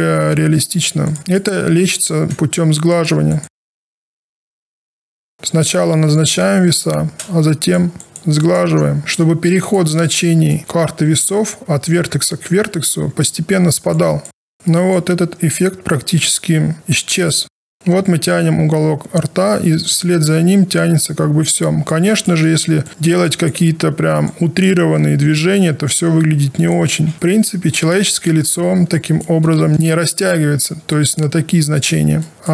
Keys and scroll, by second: 0.6 w, 26.9 ctrl+z, 30.3 ctrl+alt+r.